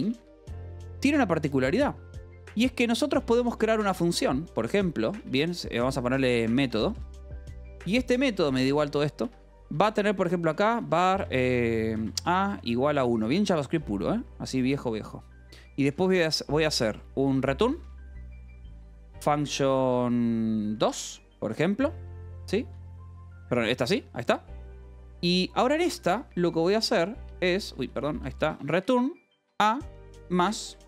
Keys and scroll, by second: 0.0-0.5 typing, 2.5-13.7 typing, 2.8 Return, 8.7 Return, 9.2 Escape, 14.2 Return, 15.3 Tab, 15.7-20.5 typing, 22.0 BackSpace, 22.4 space, 22.8 space, 23.2 Return, 23.8 Escape, 24.0-30.8 typing.